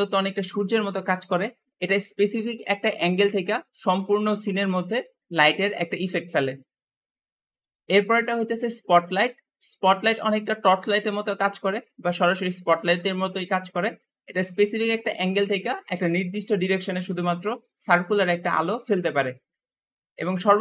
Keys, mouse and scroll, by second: 2.2 r, 2.2 r, 3.3 r, 8.7 click, 10.2 r, 11.7 r, 14.8 click, 15.2 `, 16.0 click, 16.9 click, 17.8 click, 19.3 Escape.